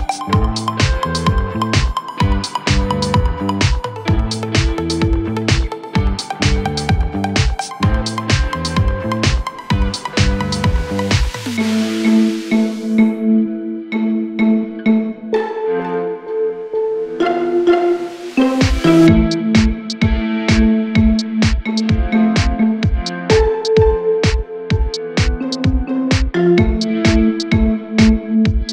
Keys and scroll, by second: 5.9 3, 6.1 ], 6.9 ctrl+z, 7.7 4, 10.3 0, 11.5 F1.